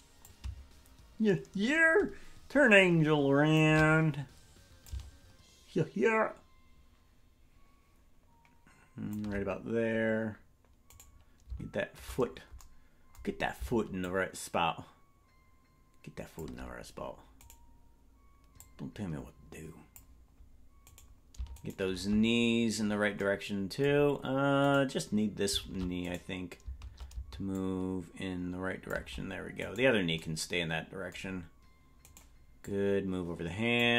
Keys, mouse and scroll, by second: 0.2-3.6 drag, 4.8-9.2 drag, 11.0 right click, 14.0-16.4 shift+drag, 17.5 right click, 18.5-20.0 drag, 20.9 right click, 24.7 right click, 27.5-29.0 shift+drag, 29.7 right click, 32.1 right click, 32.6-33.9 drag.